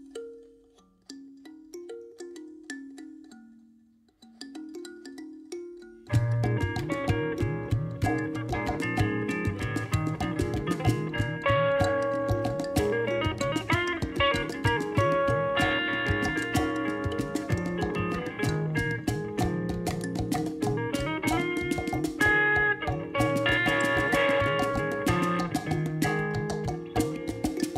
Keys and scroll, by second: 1.0 alt+a.